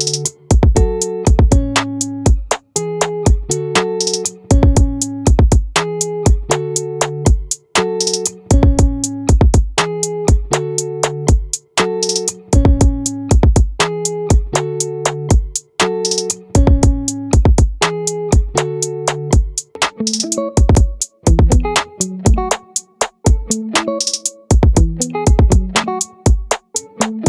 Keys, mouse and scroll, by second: 1.7-2.7 middle drag, 4.9-6.5 right drag, 7.3-10.7 right drag, 11.5 ctrl+z, 12.9-14.6 right drag, 14.6-16.6 middle drag, 23.0-25.8 right drag, 26.6-27.2 right drag.